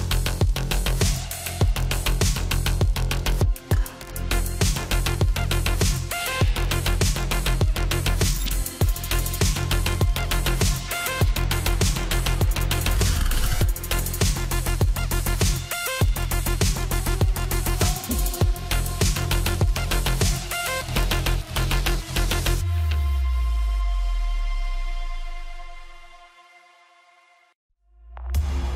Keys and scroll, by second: 12.5-13.5 typing.